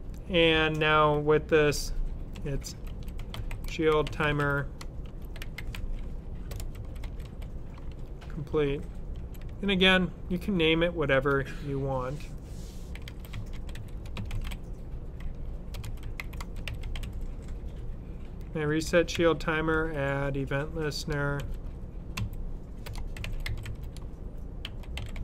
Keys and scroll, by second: 2.0-7.7 typing, 9.1-9.4 typing, 12.6-17.4 typing, 19.1-19.7 typing, 21.3-25.2 typing.